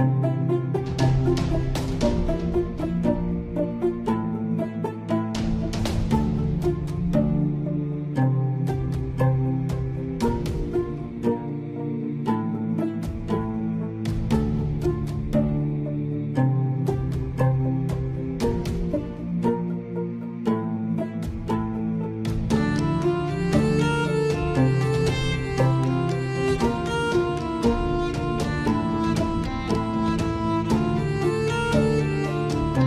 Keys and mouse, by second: 0.0 ctrl+1, 9.6 click, 11.0 Tab, 12.8 ctrl+r, 15.2 ctrl+b, 23.5 middle click, 25.3 ctrl+r, 29.1 ctrl+z, 30.2 ctrl+r.